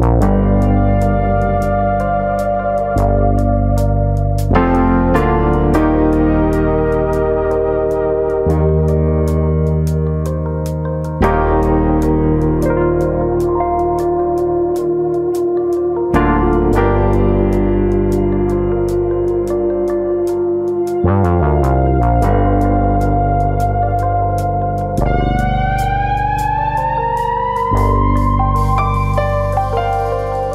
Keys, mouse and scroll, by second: 8.4 click, 9.3 l, 9.8 middle click, 10.3 shift+middle click, 11.3 p, 12.4 middle click, 12.8 Tab, 13.1 click, 13.4 Tab, 14.2 KP_3, 15.7 Tab, 15.7 a, 16.5 s, 18.3 s, 21.4 click, 21.6 middle click, 22.0 shift+middle click, 22.2 middle click, 23.3 2, 23.7 click, 23.8 middle click, 24.4 middle click, 24.5 shift+middle click, 25.4 alt+click, 26.8 g, 27.4 alt+click, 28.1 g, 28.9 click, 29.4 alt+click.